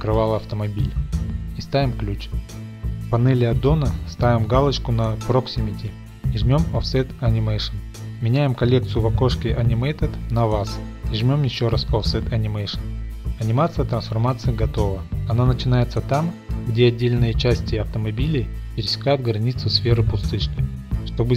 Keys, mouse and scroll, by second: 1.5-2.9 drag, 5.7-9.7 drag, 10.5 click, 11.4 click, 12.5 click, 16.6-17.0 scroll, 18.9-19.5 middle drag.